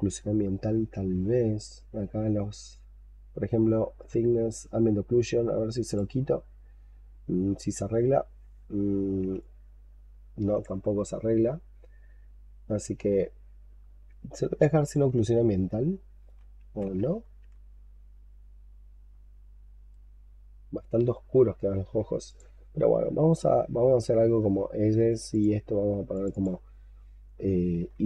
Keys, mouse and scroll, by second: 0.4-1.2 scroll up 5, 1.2-2.8 scroll down 9, 2.8-5.8 scroll down 2, 7.7-9.2 scroll up 4, 9.3 alt+click, 13.7-14.0 scroll up 2, 14.2 alt+click, 15.1 shift+right click, 16.8 ctrl+z, 19.0-22.0 scroll down 3, 25.2 double click, 26.2 double click, 27.6 double click, 27.7-28.0 typing.